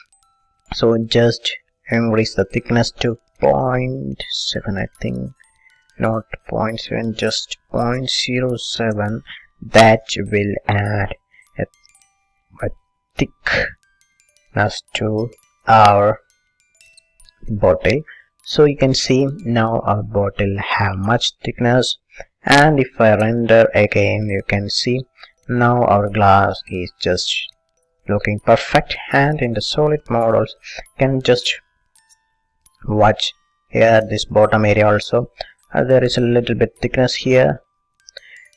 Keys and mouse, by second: 2.4-4.3 drag, 6.9-8.8 drag, 10.4-12.1 middle drag, 13.5-17.4 middle drag, 17.5 middle click, 18.4-20.1 middle drag, 20.3-21.8 middle drag, 23.6-25.7 drag, 28.9-31.0 drag, 31.9-34.9 middle drag, 36.1-38.1 middle drag.